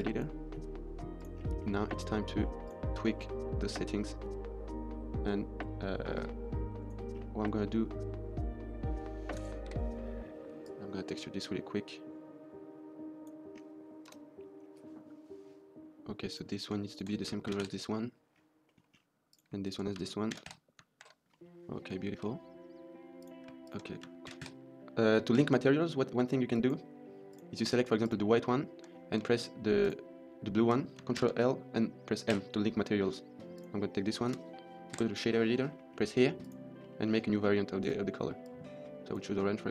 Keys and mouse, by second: 1.4 middle click, 2.0 middle drag, 2.5 click, 3.2 click, 6.1 click, 7.3-7.6 middle drag, 10.6 click, 14.0 KP_0, 16.7 shift+click, 17.5 ctrl+l, 18.6 middle click, 19.2 drag, 19.5 shift+click, 20.2 ctrl+l, 20.9 ctrl+s, 21.2 drag, 21.3 middle click, 21.9 shift+middle drag, 23.0 click, 23.6 shift+click, 24.3 ctrl+l, 25.2 ctrl+z, 26.4 click, 27.1 click, 27.9 click, 28.8 middle click, 28.9 middle click, 29.7 shift+click, 32.2 ctrl+l, 33.5 click, 36.7 middle click, 37.0 middle click, 39.5 middle click.